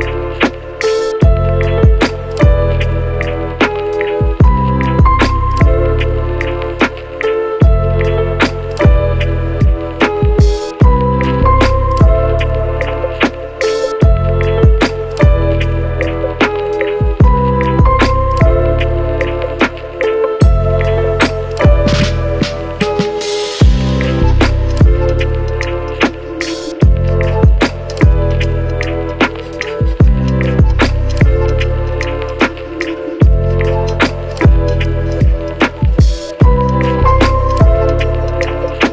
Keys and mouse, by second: 0.1 ctrl+r, 0.7 ctrl+z, 0.7 ctrl+shift+click, 1.0 ctrl+r, 1.6 g, 2.3 click, 3.0 shift+z, 3.8 ctrl+b, 4.2 shift+middle click, 4.7 alt+e, 5.4 shift+middle click, 5.9 Tab, 6.0 a, 6.0 middle click, 6.4 shift+middle click, 6.7 KP_Divide, 6.9 a, 7.0 shift+middle click, 7.5 shift+middle click, 8.5 ctrl+z, 8.5 Tab, 9.3 KP_1, 9.7 shift+middle click, 10.0 Tab, 10.2 Tab, 10.3 shift+middle click, 10.7 shift+click, 11.1 Tab, 11.2 shift+z, 11.6 ctrl+r, 12.5 shift+click, 12.7-13.8 shift+drag, 13.0 shift+z, 13.6 shift+KP_1, 14.9 Tab, 15.2 KP_1, 15.9 e, 16.4 ctrl+b, 17.1 shift+click, 17.3 Tab, 17.9 ctrl+z, 17.9 ctrl+click, 18.1 ctrl+KP_Add, 18.5 Tab, 18.5 click, 18.7 a, 19.0 click, 19.2 Tab, 19.4 Tab, 19.5 ctrl+b, 19.5 ctrl+click, 20.0 shift+click, 20.2 alt+e, 20.8 Tab, 21.0 a, 21.1 click, 21.2-23.2 shift+middle drag, 23.3 middle click, 23.7 shift+middle click, 24.2 shift+middle click, 24.4 shift+middle click, 25.2 shift+middle click, 26.7 shift+middle click, 27.2 shift+middle click, 28.4 Tab, 28.6 shift+middle click, 29.2 shift+click, 29.8 shift+click, 30.2 Tab, 30.7 Tab, 30.9 Tab, 30.9 a, 31.9 ctrl+a, 32.6 q, 33.0 click, 33.7 ctrl+click, 33.7 ctrl+middle click, 33.7 ctrl+right click, 34.2 ctrl+z, 34.2 click, 34.2 middle click, 34.2 right click, 35.1-37.6 middle drag, 36.1 ctrl+z, 36.1 Tab, 36.3 Tab, 37.6 Tab, 38.0 alt+click, 38.2 q, 38.3 Tab, 38.8 shift+click.